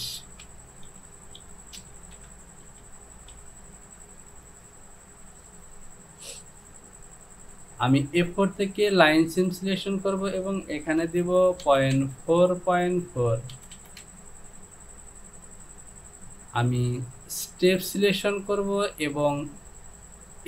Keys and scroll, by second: 0.9-3.4 typing, 11.2 Down, 11.7 Down, 12.0 Down, 13.8 Down, 14.0 Down.